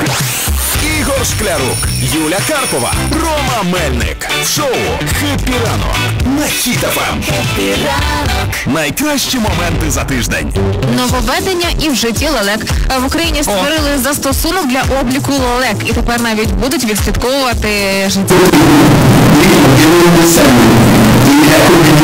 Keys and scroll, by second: 1.7 m, 2.1 Down, 2.6 Down, 3.1 Down, 3.1 Return.